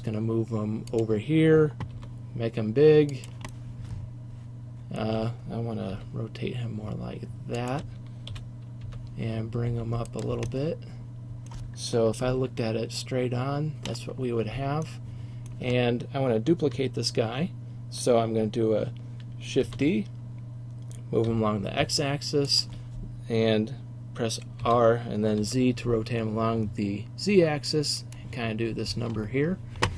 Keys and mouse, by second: 2.0 s, 2.2-3.1 drag, 3.4-3.8 drag, 4.4-5.2 drag, 6.0 r, 7.8 click, 8.4 g, 10.2 click, 12.3 KP_1, 19.7 shift+d, 22.7-24.7 drag, 24.7 r, 28.2-29.9 drag.